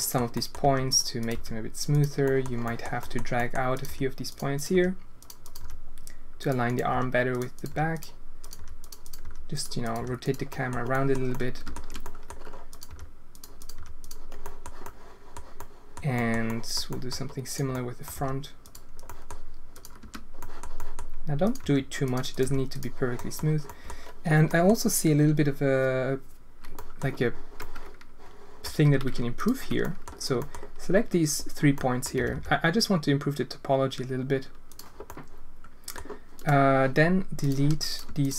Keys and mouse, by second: 0.3 click, 0.6 g, 1.2 click, 1.9 g, 2.3 click, 3.1 drag, 3.3 click, 3.7 click, 3.8 g, 4.7 g, 5.4 click, 5.5 g, 6.9-9.9 typing, 7.5 click, 8.4 click, 9.8 click, 10.6 drag, 11.0 click, 11.4 shift+click, 12.1 click, 12.8 g, 13.6 click, 13.7 g, 14.5 click, 14.9 click, 15.7 click, 16.6 click, 17.4 click, 17.7 click, 18.1 g, 19.1 click, 20.4 click, 20.7 click, 21.6 g, 22.4 g, 23.3 click, 23.8 click, 24.4 click, 26.7 drag, 27.6-28.6 drag, 29.9 click, 31.8 click, 32.1 g, 35.1 click, 36.3 click, 37.3 click, 38.2 shift+click.